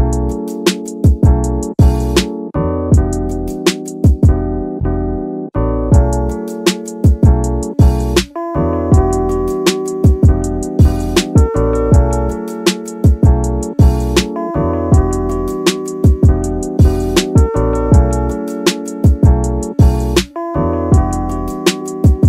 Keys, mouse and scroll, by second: 0.4 s, 1.1 y, 1.3 y, 3.2 right drag, 4.1 s, 4.9 x, 5.1 x, 8.0 click, 9.0 g, 9.5 x, 9.7 x, 13.8 click, 14.2 scroll down 2, 14.9 shift+middle drag, 16.1 shift+middle drag, 16.5-16.8 scroll up 1, 16.8 shift+middle click, 21.2 click.